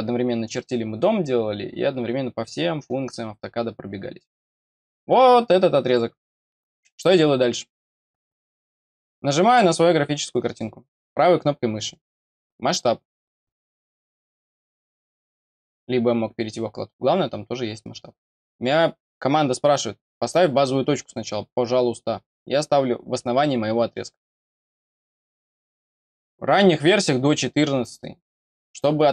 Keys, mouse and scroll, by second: 0.3 click, 5.8 click, 7.8-9.4 scroll down 1, 9.4 click, 10.9 right click, 14.6 click, 20.0 middle click, 20.6 middle click, 24.3 click.